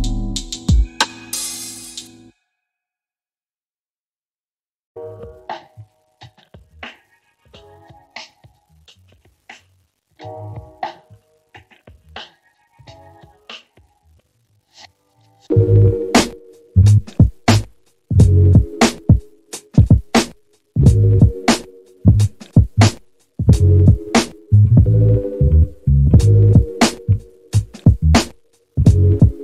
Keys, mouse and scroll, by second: 1.1 click, 5.1-7.0 ctrl+middle drag, 8.4 middle click, 9.7-19.1 drag, 20.7 click, 23.8 click, 26.1 g.